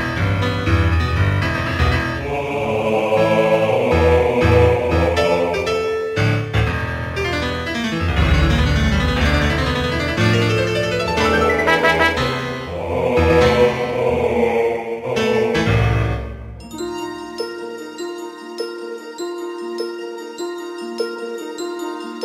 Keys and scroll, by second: 1.7 ctrl+d, 7.3 ctrl+z, 10.0 ctrl+z, 13.8 ctrl+z.